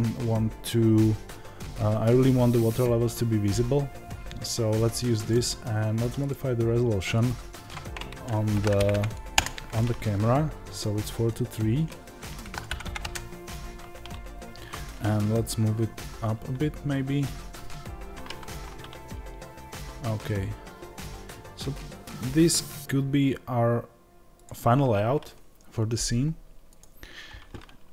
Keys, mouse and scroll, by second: 8.8 KP_0, 12.7 KP_0.